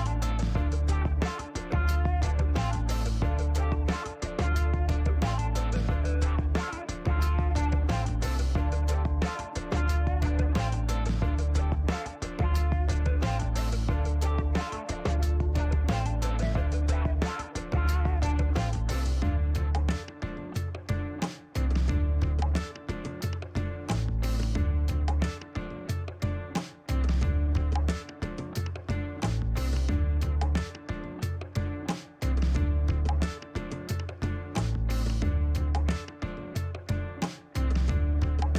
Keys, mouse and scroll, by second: 1.0 click, 3.6 KP_3, 3.8 KP_1, 4.9 BackSpace, 5.5 Return, 6.2 scroll down 2, 8.0-9.1 drag, 10.3 click, 11.8 scroll down 2, 12.6 shift+right click, 13.9 shift+middle click, 16.9 click, 18.3 click, 20.6 KP_2, 21.8 Return, 22.6 middle click, 23.1 shift+right click, 24.2 ctrl+shift+middle click, 24.9 ctrl+shift+right click, 26.7 ctrl+shift+middle click, 27.4 shift+right click, 33.1 click, 34.5 shift+right click, 36.0 middle click, 36.7 shift+right click.